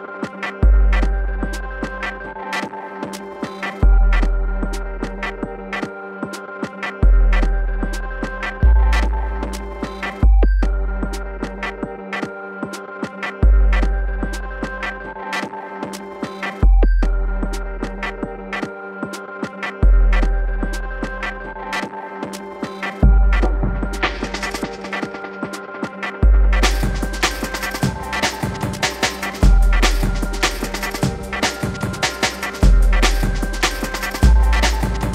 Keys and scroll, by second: 29.1 shift+Tab.